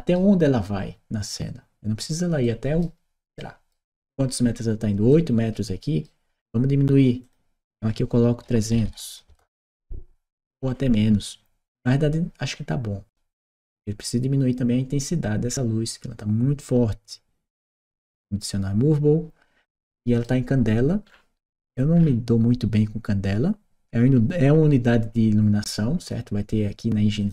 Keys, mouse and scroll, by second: 7.0 click, 8.7 q, 9.1 Return, 17.6 click, 19.5 right click, 25.8 click, 27.0 click.